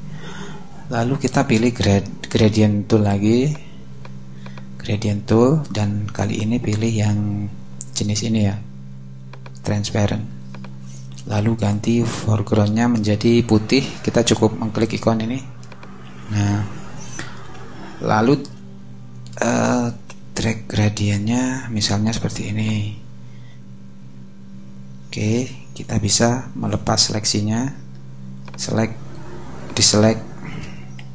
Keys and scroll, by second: 19.4 alt+shift+space, 20.2 space, 31.0 v.